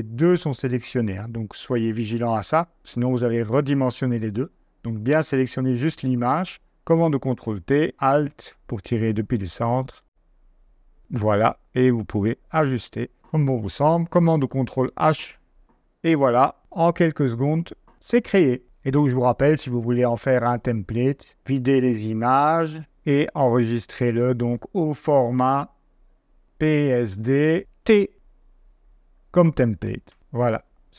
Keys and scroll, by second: 7.0 super+t, 14.4 super+h, 21.3 BackSpace.